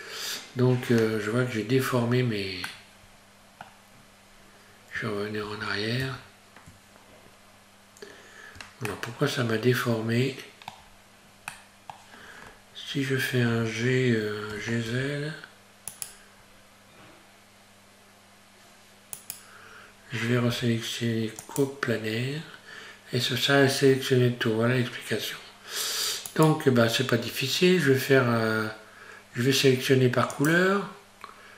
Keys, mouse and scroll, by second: 1.0 Tab, 1.9-2.3 scroll up 1, 2.7 middle click, 4.2 scroll down 1, 4.3-4.9 scroll up 1, 5.5 ctrl+z, 7.1 scroll down 1, 8.9 shift+middle click, 11.5 middle click, 14.5 g, 16.4-17.5 scroll up 1, 19.2 right click, 20.5 q, 26.3 right click, 30.3 click.